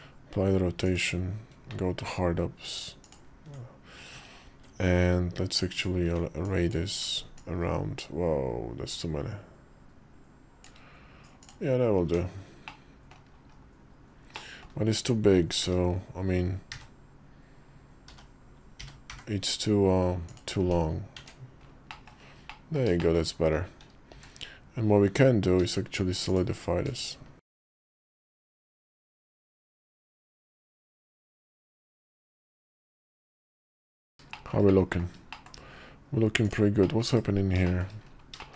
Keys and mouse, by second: 1.4 alt+w, 2.8 ctrl+click, 5.5 ctrl+click, 5.9-11.3 right drag, 11.8 Tab, 12.4 middle click, 13.3 KP_5, 14.1 middle click, 15.4 g, 17.8 g, 17.8 a, 20.4 Tab, 20.9 Tab, 21.7 middle click, 22.2 middle click, 22.7 shift+middle click, 22.9 shift+click, 23.9 q, 25.3 q, 28.7 shift+2, 30.7 shift+2, 31.6 /, 32.0 shift+2, 32.6 middle click, 33.0 shift+click, 33.1 shift+middle click, 33.4 KP_5, 34.1 shift+middle click, 34.4 middle click, 35.1 shift+middle click, 36.6 middle click, 37.0 /, 37.4 shift+middle click, 38.2 shift+middle click.